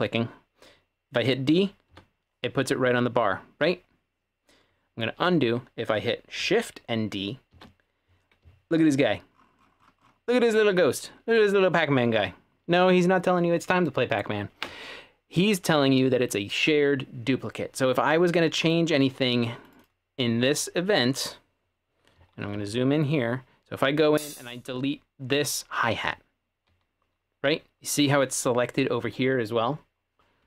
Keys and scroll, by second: 1.9 d, 5.2 super+z, 7.5 d, 22.2-22.6 typing, 26.0 w, 26.7 w, 27.1 w.